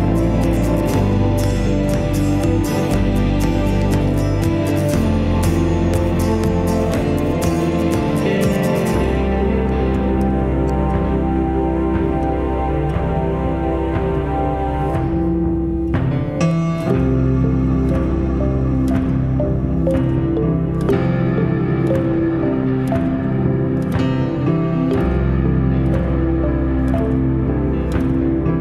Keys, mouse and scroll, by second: 2.0 scroll down 1, 2.9 alt+click, 4.7 alt+click, 8.5-9.1 scroll up 1, 11.2 s, 13.9-14.7 typing, 15.7 right click, 19.6-20.1 scroll down 1, 21.3-22.4 scroll up 1, 22.4-22.9 scroll, 26.9 s.